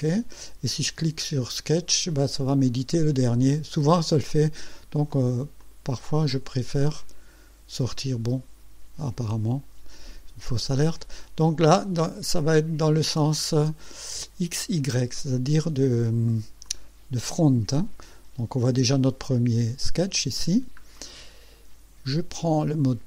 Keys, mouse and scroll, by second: 2.2 click, 3.9 click, 5.1 click, 5.6 click, 6.3 click, 9.0 click, 14.5 click, 16.6 click, 18.1 scroll up 2, 18.8 scroll up 2, 20.5 scroll down 2, 20.9-21.7 right drag.